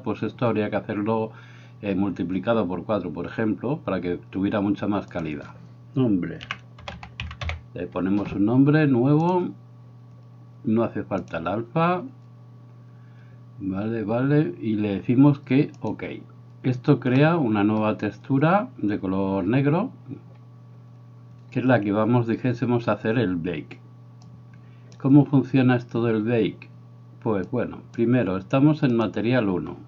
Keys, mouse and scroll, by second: 17.3 middle click, 24.5 click, 27.6 click.